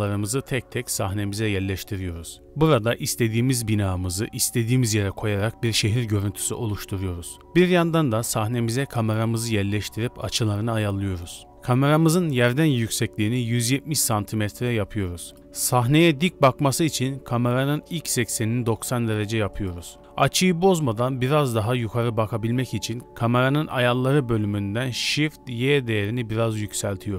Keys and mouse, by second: 0.6 g, 0.9 click, 1.8 shift+click, 3.6 click, 3.8 middle click, 4.3 middle click, 5.6 shift+middle click, 7.5 shift+a, 9.2 ctrl+alt+KP_0, 10.2 r, 11.5 g, 13.0 KP_0, 14.4 r, 15.4 n, 15.6-16.8 drag, 17.7 n, 18.9 click.